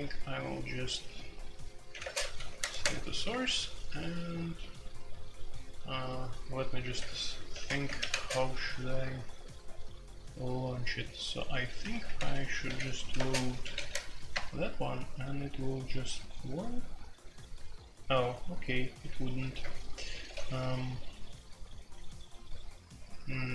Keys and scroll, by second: 1.9-3.2 typing, 3.3 Return, 6.9-8.1 typing, 12.1-13.8 typing, 13.9 Tab, 14.3 Return, 19.4 0, 19.6 Return, 20.3 ctrl+d.